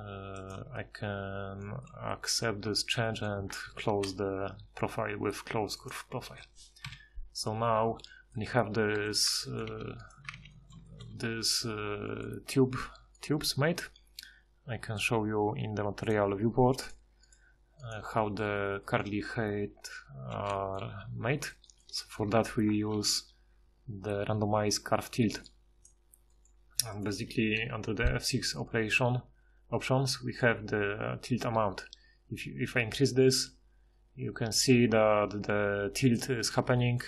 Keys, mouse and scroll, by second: 2.7 Tab, 3.6 ctrl+shift+h, 6.9 KP_Divide, 9.7 alt+q, 10.3 alt+q, 12.5 a, 16.6 a, 21.4-22.1 middle drag, 22.7 ctrl+shift+h, 25.9 ctrl+shift+h, 27.6 F6, 30.7 F6, 36.8-37.0 middle drag.